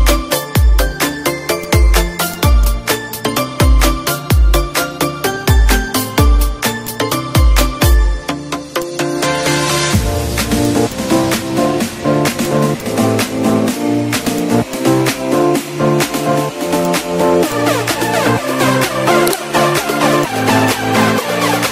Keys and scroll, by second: 0.2 F1, 2.8 -, 3.5 space, 5.1 space, 5.9 z, 7.7 F4, 11.6 ctrl+shift+c, 13.8 ctrl+shift+c, 15.1 Down.